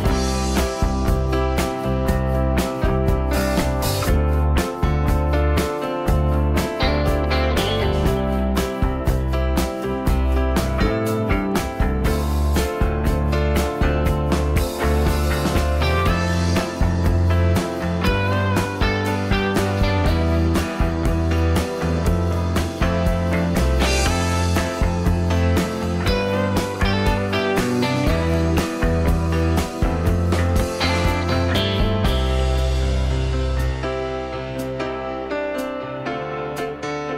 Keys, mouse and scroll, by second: 2.9 F2, 14.6 s, 22.3 m, 23.9 m, 35.6 s.